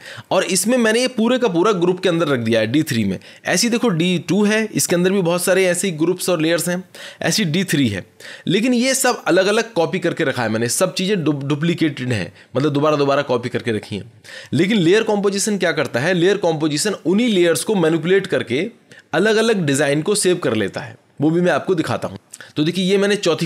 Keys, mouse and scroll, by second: 2.9 click, 4.3 click, 7.6 click.